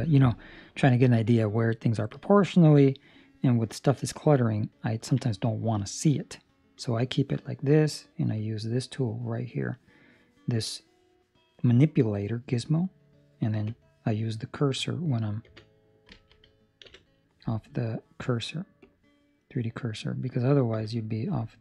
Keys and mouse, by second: 4.9 ctrl+middle click, 6.7 click, 10.6 click, 13.6 click, 15.4 ,.